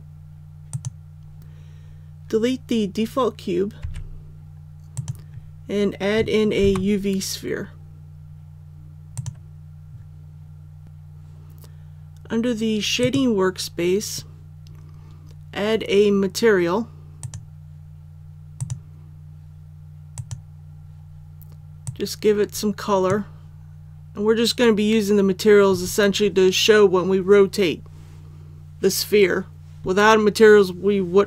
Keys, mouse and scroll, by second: 3.7 x, 4.9 click, 6.5 shift+a, 9.1-23.7 drag.